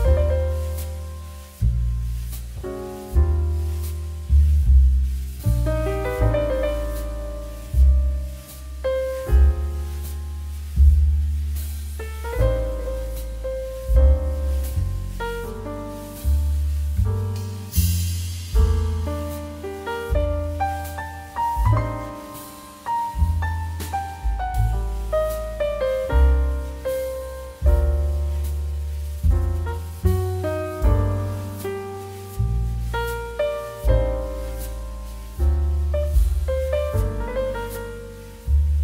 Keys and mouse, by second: 0.2 click, 0.7 shift+middle click, 1.1 Tab, 1.3 click, 1.5 3, 1.6 click, 2.0 e, 2.8 click, 3.0 middle click, 3.3 shift+middle click, 3.8 shift+middle click, 5.6 s, 6.8 shift+z, 7.2 click, 7.4 e, 7.7 middle click, 8.2 click, 8.4 Tab, 8.5 click, 8.8 g, 9.4 z, 9.6 click, 9.8 right click, 10.1 click, 10.5 Tab, 11.2 click, 11.6 middle click, 11.8 shift+middle click, 12.0 middle click, 13.0 shift+middle click, 13.3 middle click, 13.8 shift+middle click, 14.0 middle click, 14.3 shift+middle click, 15.4 middle click, 16.2 shift+middle click, 16.6 click, 16.7 middle click.